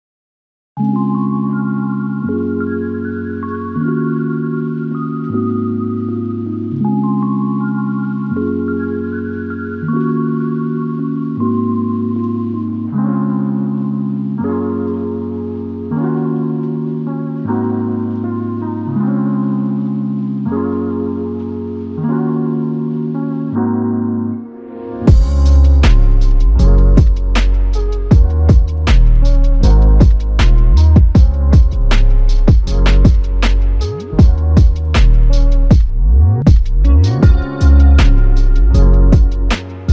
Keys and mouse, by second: 0.4 double click, 0.8 alt+click, 5.1 double click, 5.8 alt+click, 9.3 g, 10.3 alt+shift+click, 13.9 typing, 15.8 double click, 19.1 alt+click, 23.8 double click, 25.3 alt+click, 27.0 double click, 27.9 alt+click, 29.2 double click, 32.4 alt+click, 33.8 alt+click, 36.0 double click, 36.6 alt+click, 37.6 alt+click.